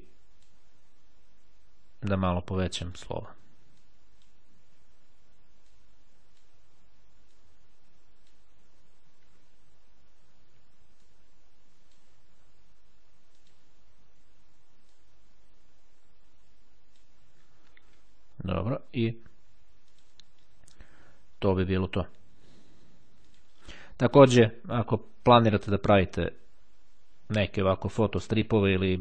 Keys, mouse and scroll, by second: 3.9 click, 5.8-6.9 drag, 7.5-8.9 drag, 11.1-12.5 drag, 13.5 click, 14.9-17.6 drag, 19.9 click, 23.4 click.